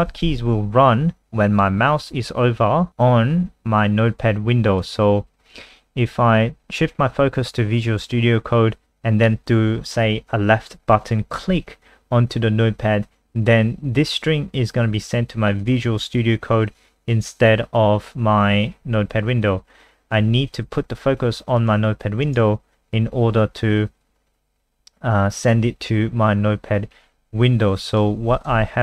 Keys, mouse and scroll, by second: 4.8 click, 28.6 alt+F4.